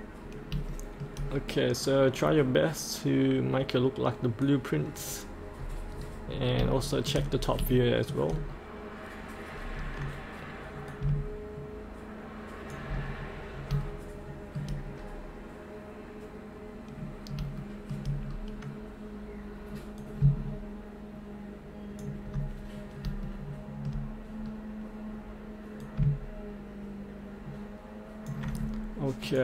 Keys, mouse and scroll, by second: 0.7 shift+middle click, 2.2 scroll up 1, 4.4 click, 5.6 click, 5.7-6.7 scroll up 1, 6.7 shift+middle click, 7.7 shift+middle click, 8.3 scroll up 1, 10.9 click, 13.1-13.5 scroll up 1, 13.9 shift+middle click, 14.9-15.9 scroll down 1, 17.1-17.4 scroll up 1, 17.6 shift+middle click, 18.2-20.0 scroll down 1, 20.0 click, 22.7-23.1 scroll up 1, 23.3 shift+middle click, 24.4 scroll down 1, 25.8 click.